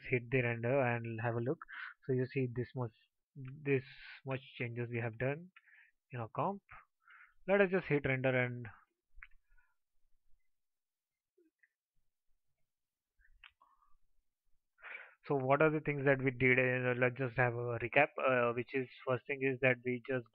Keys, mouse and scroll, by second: 8.3 ctrl+s.